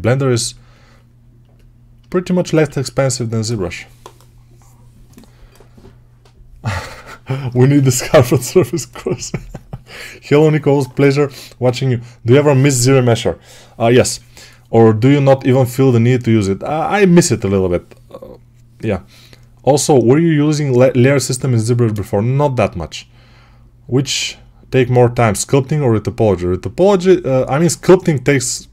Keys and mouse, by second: 2.6 1.